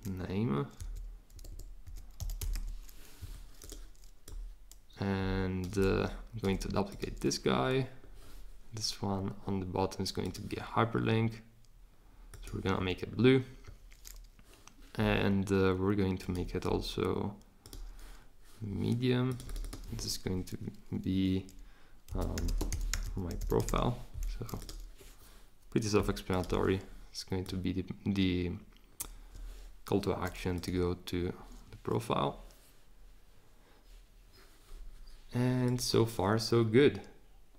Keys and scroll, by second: 0.7-3.0 typing, 22.1-24.1 typing.